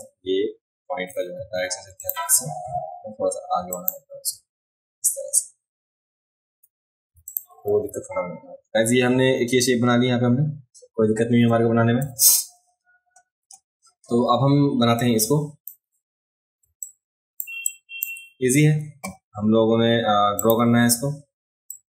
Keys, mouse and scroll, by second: 1.4 a, 2.0 click, 3.7 shift+click, 7.1 v, 7.3 click, 15.0 click, 16.6 space, 16.8 click, 17.6 click, 20.4 click, 21.7-21.8 drag.